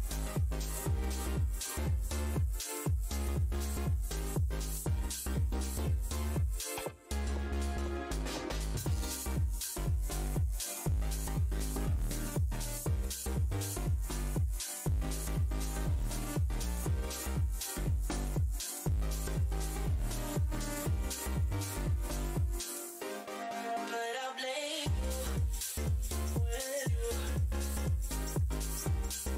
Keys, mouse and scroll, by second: 0.6-1.3 typing, 2.5 scroll down 1, 2.9 e, 4.0 click, 6.3 click, 7.6 z, 11.0 alt+click, 13.1 scroll down 1, 13.4 w, 14.3 alt+click, 14.6 scroll down 1, 14.6 w, 17.2 shift+click, 17.4 shift+r, 18.3 ctrl+click, 20.6 shift+z, 21.3 click, 22.0 shift+Tab, 22.9-26.3 typing, 23.6 Tab, 25.6 alt+click, 26.7 click, 27.8 alt+scroll up 1, 28.6-28.9 alt+scroll.